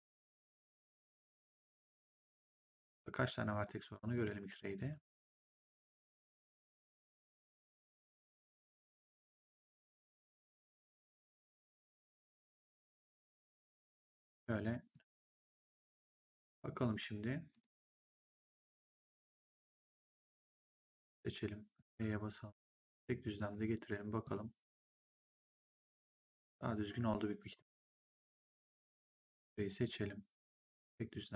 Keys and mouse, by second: 2.3 click, 4.0 click, 5.5 click, 9.4 click, 10.6 click, 12.1 click, 13.9 click, 17.4 click, 20.2 click, 21.1 r, 21.8 click, 24.1 right click, 24.7 click, 29.0 click, 30.4 click.